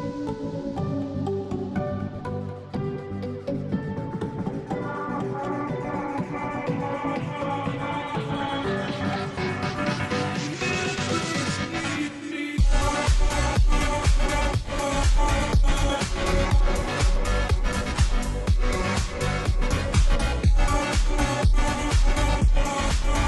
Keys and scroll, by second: 12.0-15.0 space, 17.9-18.7 space, 19.3 space.